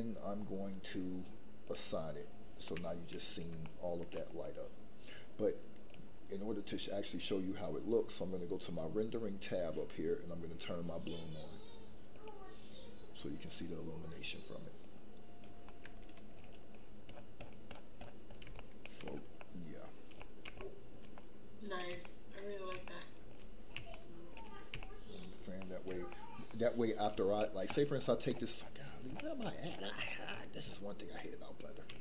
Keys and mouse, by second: 2.7 middle click, 3.6 shift+middle click, 12.1 click, 14.8 click, 15.7 middle click, 18.6 shift+middle click, 19.4 middle click, 20.2 middle click, 20.6 shift+middle click, 21.1 middle click, 22.0 shift+middle click, 22.8 shift+middle click, 23.9 shift+middle click, 24.7 shift+middle click, 25.6 middle click, 26.1 shift+middle click, 31.1 middle click.